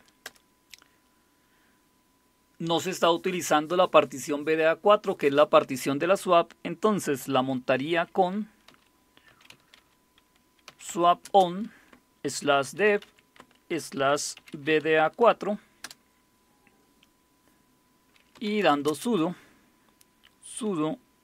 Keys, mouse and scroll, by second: 0.0-0.2 typing, 8.7-11.2 typing, 12.3-15.8 typing, 18.3-18.9 typing.